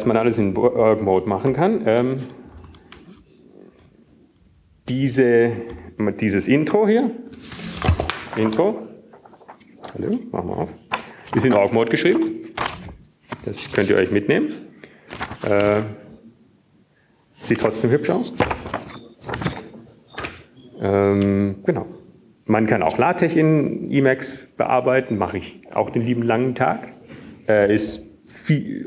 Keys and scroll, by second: 3.8 Up, 3.8 ctrl+k, 4.6 ctrl+k, 4.8 ctrl+k, 5.1 ctrl+k, 5.8 ctrl+x, 5.8 ctrl+s, 6.1 Up, 7.2 Up, 8.4 Up, 14.9 Tab.